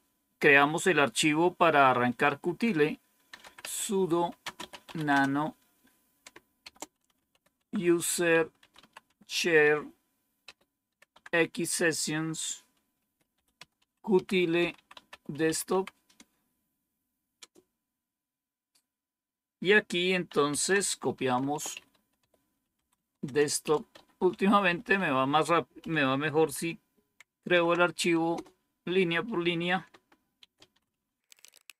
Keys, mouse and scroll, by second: 2.9-9.2 typing, 10.4-11.0 typing, 12.7-17.8 typing, 20.1-28.2 typing, 30.0-31.7 typing.